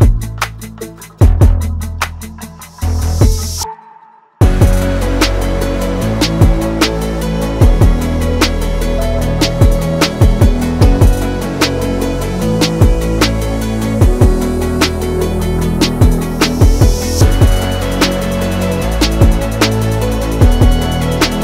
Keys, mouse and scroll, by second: 2.2 click, 4.8 ctrl+v, 6.1-7.5 drag, 9.9 click, 12.9 ctrl+v, 16.1 click, 18.0 ctrl+v, 20.3 click.